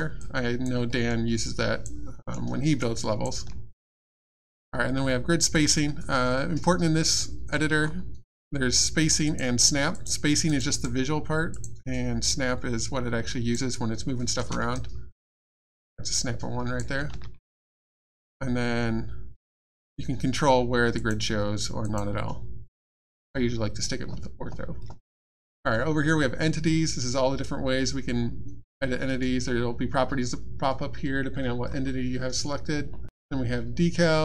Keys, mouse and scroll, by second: 0.2 alt+click, 0.9 alt+middle click, 1.1 alt+scroll down 1, 1.4 alt+click, 2.1 alt+middle click, 2.5 alt+scroll down 1, 2.8 alt+click, 7.2 middle click, 7.8-8.2 scroll up 1, 9.2 click, 10.5 right click, 12.3 click, 14.4 space, 14.7 right click, 19.7 click, 20.9 click.